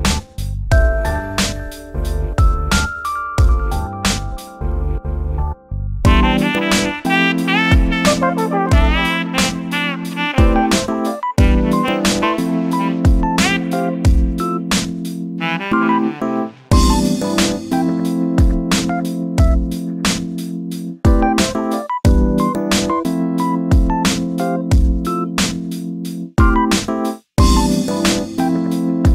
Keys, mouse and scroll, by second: 0.1 x, 0.9 1, 1.1-1.7 scroll up 7, 1.7 click, 2.3 shift+click, 2.5 f, 2.7 scroll down 3, 2.8 shift+middle click, 3.2 scroll up 1, 3.5 click, 3.7-4.5 shift+middle drag, 4.5 shift+click, 5.3 f, 5.4-6.0 scroll down 3, 6.2 Tab, 6.4-7.2 shift+middle drag, 7.2 scroll down 2, 7.4-7.8 shift+middle drag, 7.8-8.2 scroll down 2, 8.2-8.8 shift+middle drag, 8.8 click, 9.3 click, 9.8 click, 10.2 Tab, 10.7 click, 13.8 g, 16.1 click, 16.2 click, 16.6 click, 17.6 g, 20.2 click, 21.4 g, 23.8 click, 24.9 g, 26.7 click, 27.7 g.